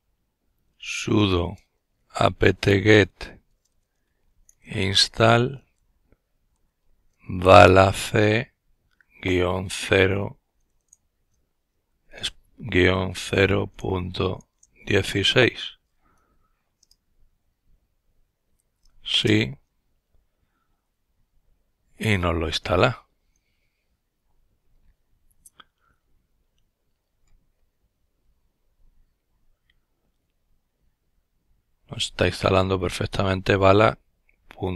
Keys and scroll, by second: 0.0-10.2 typing, 11.5-14.1 typing, 15.2 Return, 16.0-17.4 typing, 18.7-19.4 typing.